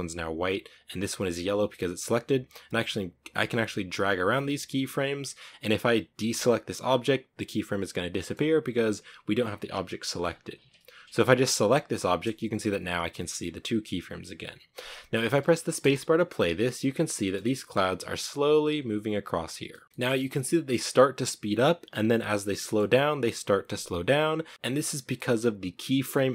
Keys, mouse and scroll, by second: 0.9-4.0 right drag, 5.5 a, 10.9 right click, 15.1 space, 16.0 middle click, 16.9 a, 18.8 scroll down 2, 19.1-22.7 middle drag, 22.7-23.3 scroll up 1, 24.2 scroll down 3, 24.4 middle click, 24.5 v.